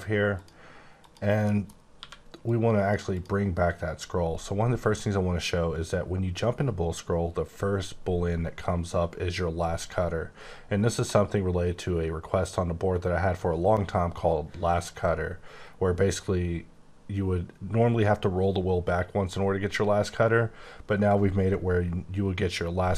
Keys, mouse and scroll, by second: 0.3 click, 1.0 click, 1.4 middle click, 1.7 scroll up 1, 1.9 q, 2.4 click, 3.1 click.